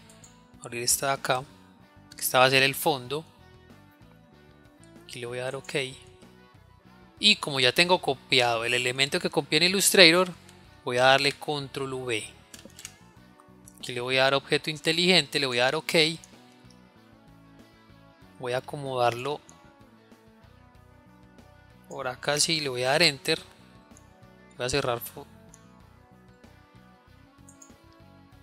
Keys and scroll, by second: 11.9 ctrl+v.